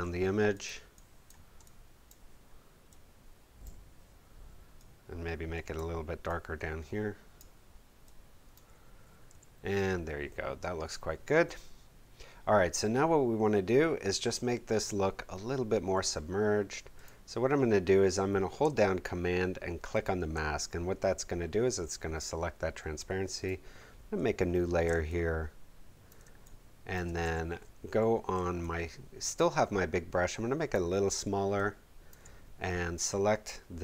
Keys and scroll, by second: 9.3 v, 24.8 space, 27.2 b.